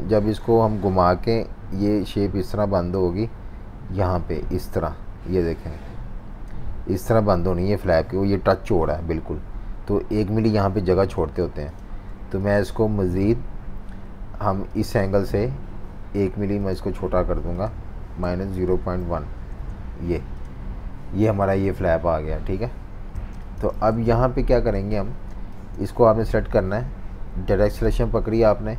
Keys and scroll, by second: 10.8 super+z, 11.2 super+z, 18.0-19.5 typing, 19.6 Return, 23.2-24.8 typing.